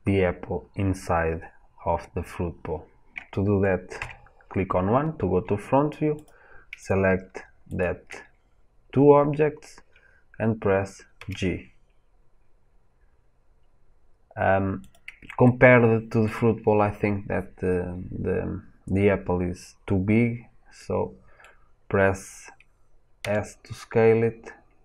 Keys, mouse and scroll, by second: 3.9 KP_1, 6.1 click, 6.7 click, 7.6 shift+click, 11.1 g, 14.8 click, 20.7-23.1 middle drag, 23.1 s.